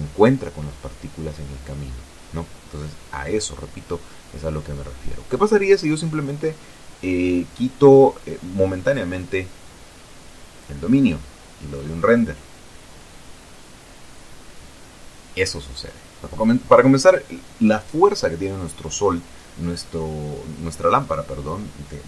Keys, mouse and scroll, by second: 2.8 Escape, 3.4 right click, 7.1 click, 10.2 x, 11.4 click, 12.6 F12.